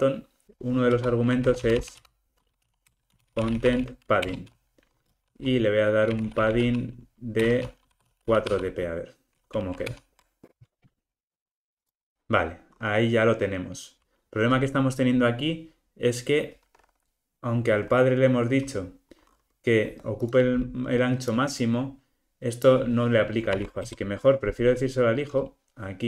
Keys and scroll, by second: 4.3 Return, 9.8 alt+super+l, 23.6 super+x.